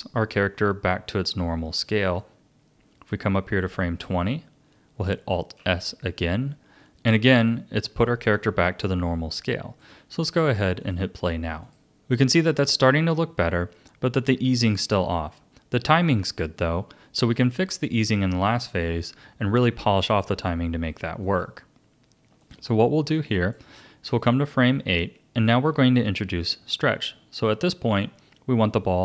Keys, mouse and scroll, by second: 2.2-5.3 drag, 5.6 alt+s, 6.9 click, 8.3-10.4 drag, 11.6 click, 12.5-14.0 drag, 21.2-25.5 drag.